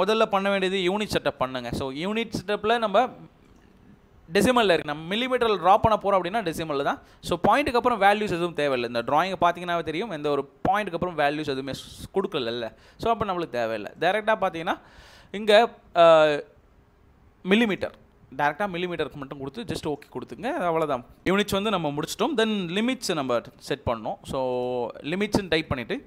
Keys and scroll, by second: 0.4 typing, 1.2 Return, 22.5-24.2 typing, 24.5 Return, 25.9-26.0 typing.